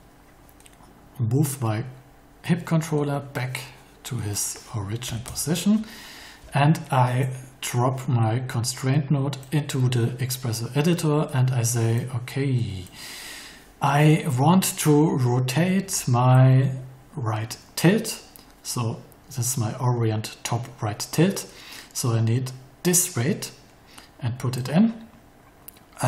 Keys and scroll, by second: 5.0 0, 5.2 Return.